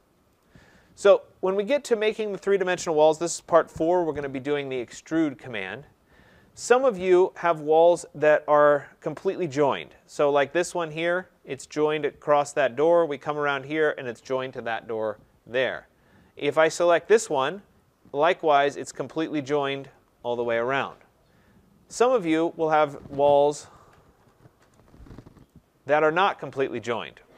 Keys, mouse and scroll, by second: 0.4 click, 1.2 middle click, 1.3 middle click, 5.1 middle click, 5.7 middle click, 7.2 scroll, 7.5 click, 8.6-10.1 scroll, 10.2-10.8 scroll, 12.2-12.5 scroll, 13.4-13.9 scroll, 15.6-16.6 scroll, 17.0 click, 22.1 click, 23.6-24.2 typing, 24.6 Return, 25.4 click, 26.1 click, 27.1 typing.